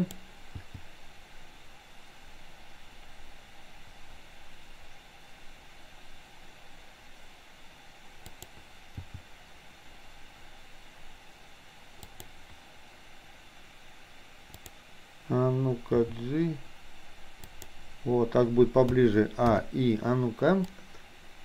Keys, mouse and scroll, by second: 0.0 click, 0.7 g, 9.2 g, 14.7 click, 15.9 g, 18.9 a, 19.5 i, 20.8-21.4 drag.